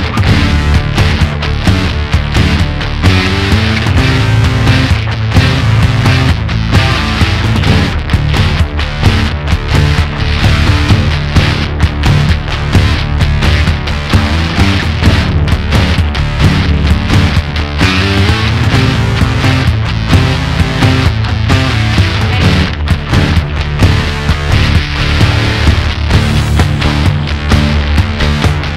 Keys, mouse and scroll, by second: 0.6 shift+click, 1.4-3.3 middle drag, 3.3 ctrl+click, 4.0-6.2 middle drag, 6.2-7.2 scroll up 1, 7.2-8.6 middle drag, 8.6 alt+shift+click, 9.8 alt+shift+click, 10.8 alt+shift+click, 11.4 middle click, 12.4 alt+shift+click, 13.2-17.3 middle drag, 17.3 alt+shift+click, 18.0-19.4 middle drag, 19.4-20.6 scroll down 1, 20.6 shift+middle click, 21.5 shift+click, 23.4-26.3 drag, 26.8 click, 27.9-28.7 drag.